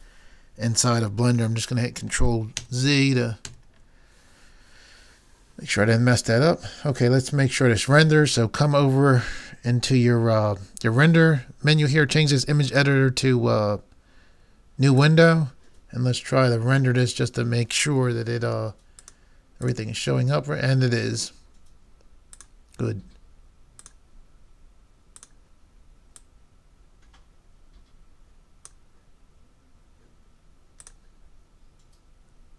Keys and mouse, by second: 2.7 ctrl+z, 3.5 ctrl+z, 12.7-14.8 drag, 19.0 click, 23.8-28.0 drag.